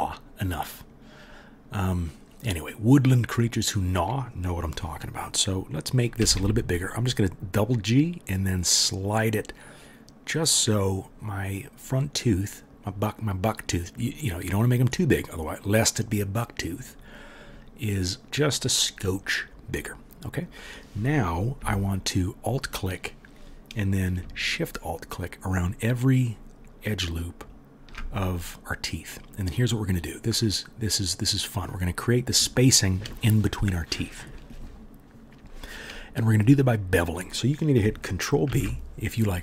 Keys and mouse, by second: 6.2 g, 22.0 alt+middle click, 22.1-24.7 alt+drag, 24.7 alt+shift+middle click, 24.7-25.5 alt+shift+drag, 25.5 alt+shift+middle click, 25.5-26.9 alt+shift+drag, 26.9-27.9 alt+shift+middle drag, 27.9-31.0 alt+drag, 31.0 middle click, 38.5 ctrl+b.